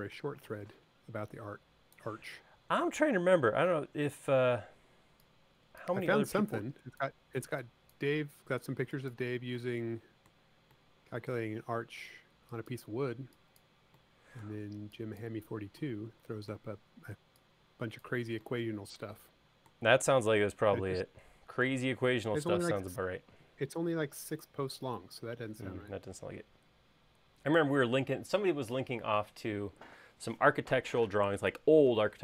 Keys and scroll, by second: 3.0 l, 4.8 e, 22.3 space.